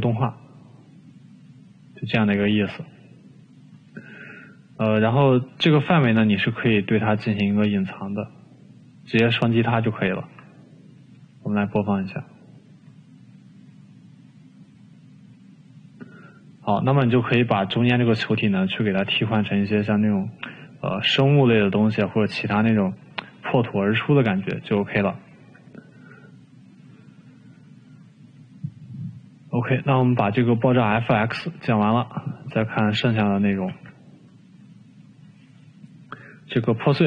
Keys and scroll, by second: 28.0 Delete, 35.8 Delete.